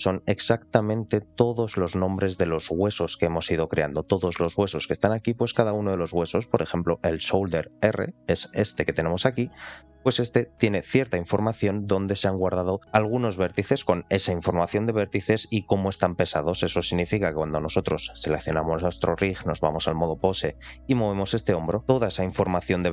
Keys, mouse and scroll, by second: 3.8 scroll down 2, 4.1 shift+middle drag, 5.1-5.5 shift+middle drag, 6.9 click, 8.1 alt+middle click, 8.7-9.7 scroll up 4, 9.7 middle drag, 10.0 scroll down 2, 17.1 click, 17.9 click, 18.9-19.6 drag, 20.3 click, 20.9 r, 21.8 click.